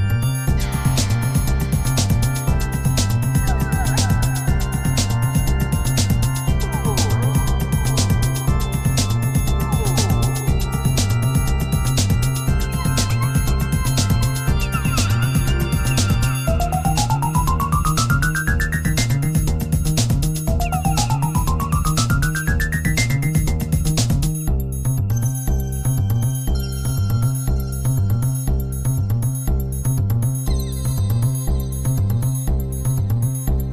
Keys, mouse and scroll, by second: 7.4-10.2 drag, 11.1-13.5 drag, 16.8 click, 18.2 click, 23.2-29.3 drag, 31.5-33.7 drag.